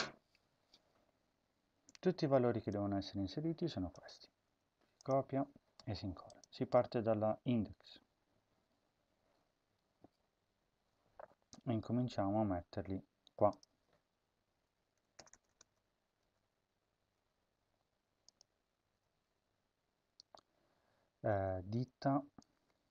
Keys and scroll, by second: 4.2 ctrl+c, 14.7 End, 15.1 Return, 15.3 Return, 16.1 Page_Up, 18.7 ctrl+v.